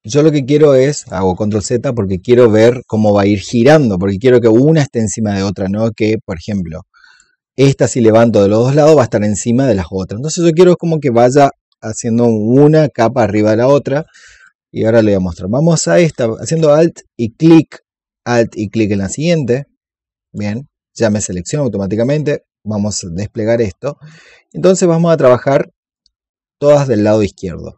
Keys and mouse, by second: 0.5 click, 6.4-8.8 drag, 14.3 click, 18.8 alt+click, 21.8 click, 24.0-27.7 drag.